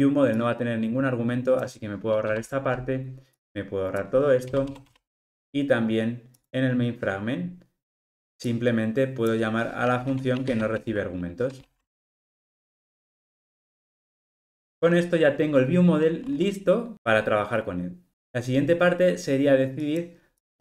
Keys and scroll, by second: 12.4 alt+super+l, 12.6 ctrl+alt+o.